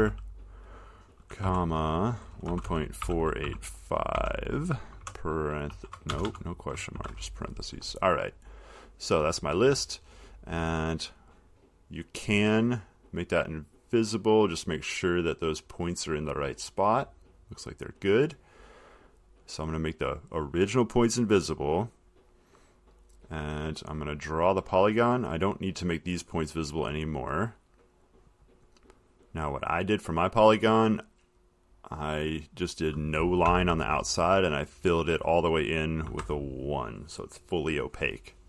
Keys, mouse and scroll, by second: 0.0-0.6 typing, 1.7-9.0 typing, 9.1 click, 10.3 click, 11.7 click, 14.2 click, 14.9 click, 17.7 click, 21.0 click, 23.0 click, 24.1 click, 26.0 click, 29.8 click, 32.3 click, 33.2 click, 33.7 0, 34.5 click, 36.3 1.